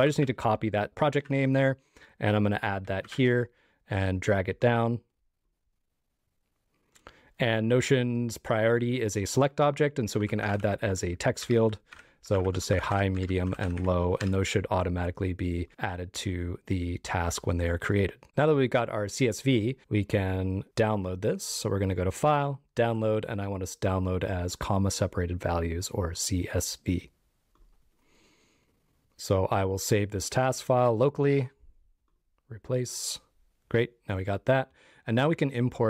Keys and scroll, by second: 0.9 shift+super+}, 3.1 super+v.